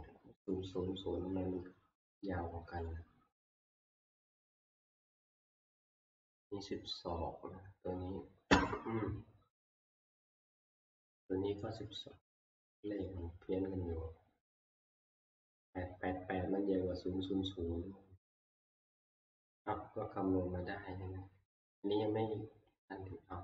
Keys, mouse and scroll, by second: 2.9 click, 5.1 click, 5.4 click, 10.1 click, 11.3-18.1 drag, 18.5 click, 19.2 scroll down 1, 21.3 scroll up 1.